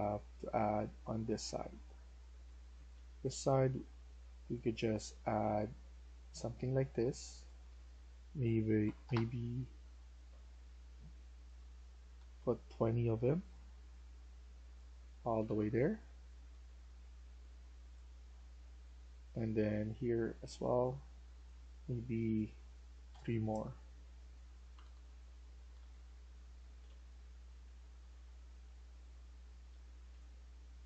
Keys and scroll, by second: 1.8-3.6 typing, 8.5-9.4 typing, 11.8-14.3 typing, 15.1 Escape, 15.3 Escape, 15.5-16.6 typing, 23.0 3, 24.5 Escape, 24.7 Escape, 25.0-30.5 typing.